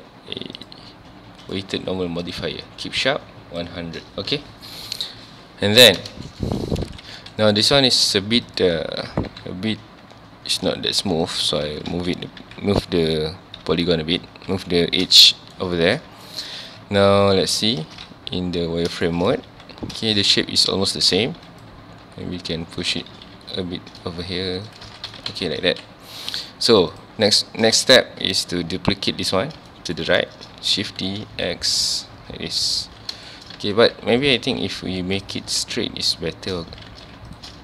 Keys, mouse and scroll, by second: 3.0-5.7 drag, 5.7-6.4 scroll down 1, 6.4 shift+middle click, 6.6 scroll up 1, 6.9 alt+a, 7.1 ctrl+s, 7.4 click, 7.6 Tab, 7.8 2, 8.5 alt+click, 9.1 g, 11.4 click, 11.4 alt+a, 11.7 Tab, 11.9 alt+a, 12.2 scroll down 1, 12.4 ctrl+s, 13.4 scroll up 1, 13.7 Tab, 15.2 shift+middle click, 16.0 scroll down 2, 16.2 shift+middle click, 16.6 Tab, 17.2 z, 17.9 scroll up 2, 18.6 scroll down 1, 19.1 shift+middle click, 19.3 scroll up 1, 19.5 ctrl+s, 20.0 shift+scroll up 1, 20.1 shift+middle drag, 20.4 Tab, 21.3 ctrl+r, 23.0 right click, 23.3 g, 24.8 shift+click, 24.9 alt+a, 25.3 alt+a, 25.4 scroll down 1, 25.7 ctrl+s, 26.2-26.9 scroll up 2, 26.9 click, 27.4-27.8 scroll up 2, 27.8 z, 28.3 click, 29.5 scroll down 2, 29.7-30.4 shift+middle drag, 30.4-30.9 scroll up 2, 30.9 shift+d, 32.7 click, 32.9 alt+a, 33.3 shift+middle click, 33.6 ctrl+s, 33.7-34.2 scroll up 2, 34.2 click, 34.4 Tab, 34.6 2, 35.2 alt+click, 36.1 alt+shift+click, 36.9 ctrl+z, 37.3 alt+shift+click.